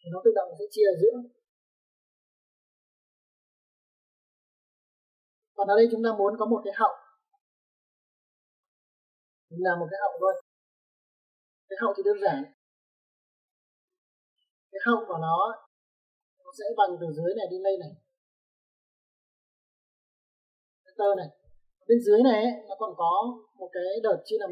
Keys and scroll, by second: 1.4 space, 5.3-5.8 typing, 21.6 space.